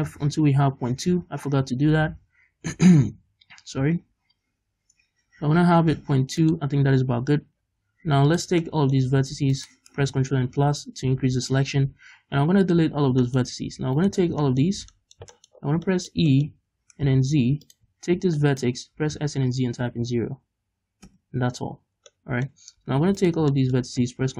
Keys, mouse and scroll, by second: 6.6 shift+click, 6.8-8.4 scroll down 2, 8.4 click, 8.7 middle click, 9.6-10.6 alt+right drag, 10.6 ctrl+KP_Add, 11.9 x, 13.4 middle click, 13.5 scroll down 1, 14.1 alt+right click, 14.2 scroll down 1, 14.5 shift+middle click, 15.1 click, 15.4 shift+middle click, 15.6-16.0 scroll up 1, 16.4 shift+middle click, 16.9 e, 17.8 click, 18.6 shift+right click, 19.0 s, 21.2 Return, 21.9-22.2 scroll down 2, 22.2 middle click, 23.3 alt+right click, 23.6 middle click.